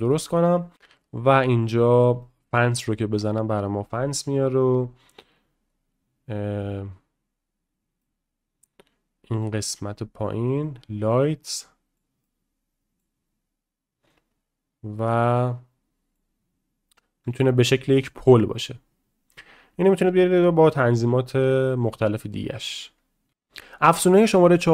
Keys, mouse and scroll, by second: 0.1 middle click, 2.2 middle click, 2.9-3.9 middle drag, 8.0-9.4 middle drag, 10.3 click, 11.2-12.0 middle drag, 12.2 middle click, 15.1-16.1 drag, 18.0 middle click.